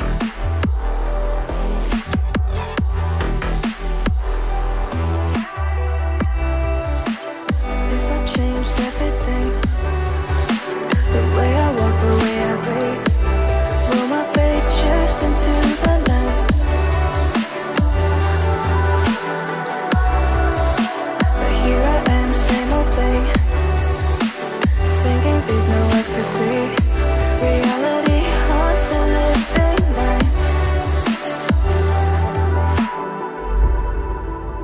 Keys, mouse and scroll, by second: 2.4 double click, 10.3 right click, 18.4 ctrl+click, 21.1 ctrl+z.